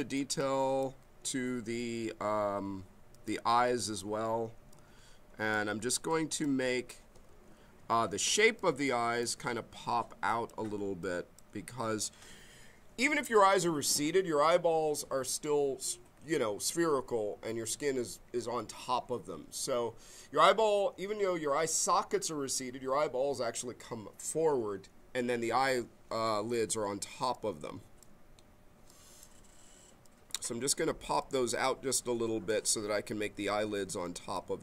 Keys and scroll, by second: 7.2 ctrl+z, 8.3 b.